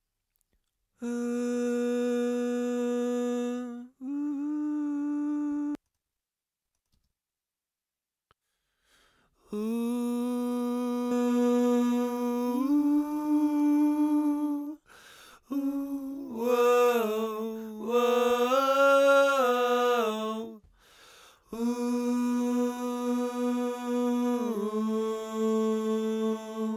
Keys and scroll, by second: 5.5 space, 6.9 space.